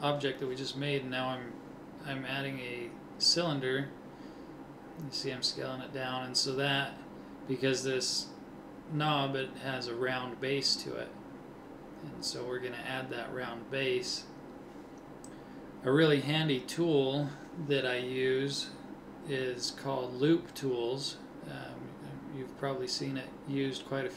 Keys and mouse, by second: 3.0 middle click, 3.4 s, 4.6 s, 5.8 s, 8.2 middle click, 12.4 s, 15.5 a, 16.5 l, 17.6 click, 19.5 ctrl+Tab, 21.1-23.4 right drag, 22.5 Delete.